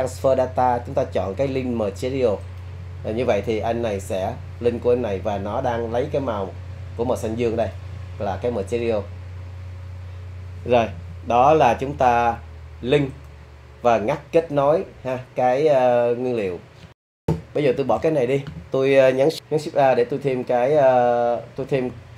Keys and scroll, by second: 17.3 BackSpace, 17.3 Delete, 19.1 shift+a.